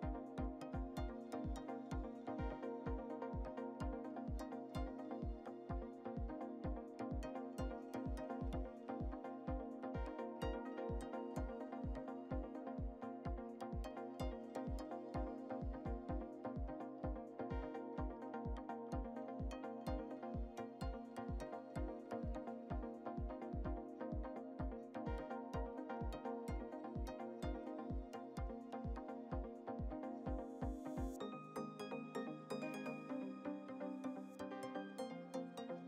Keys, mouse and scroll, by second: 1.2 click, 1.7 scroll up 1, 2.9 shift+d, 4.7 scroll up 2, 5.0-5.8 shift+middle drag, 5.7 shift+click, 6.8 s, 9.4-10.8 shift+middle drag, 10.8-11.9 drag, 13.8-14.6 shift+middle drag, 14.6-15.2 scroll up 2, 15.2 scroll up 1, 15.4 click, 16.4-17.5 shift+middle drag, 17.5 click, 18.8-19.7 shift+middle drag, 19.7 ctrl+a, 20.5-21.0 scroll up 2, 21.0 Tab, 21.8 ctrl+r, 25.3-26.3 middle drag, 26.3 scroll, 26.7-27.2 scroll up 3, 28.1 click, 29.1-29.6 scroll down 2, 29.6 e, 32.4 Tab, 32.7 click, 33.1-33.9 scroll down 9, 34.2-34.7 shift+middle drag, 34.7 scroll down 2, 35.0-35.6 middle drag, 35.6-35.8 scroll down 1.